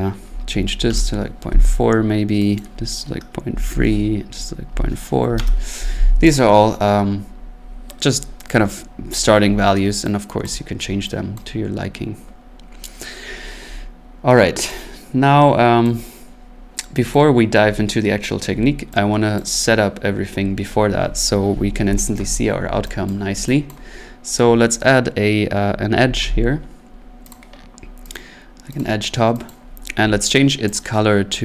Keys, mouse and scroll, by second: 0.2-0.9 typing, 2.6 click, 3.5-5.4 typing, 6.3 click, 6.6 scroll, 7.2 scroll, 7.3-8.0 typing, 10.5 click, 11.4 click, 14.2 middle click, 15.8 click, 17.1 click, 19.4 click, 23.1 click, 23.7 click, 24.7 right click, 25.9-26.4 typing, 27.3 click, 28.1 click, 28.8 click, 29.5 click, 29.7 scroll, 30.8 click.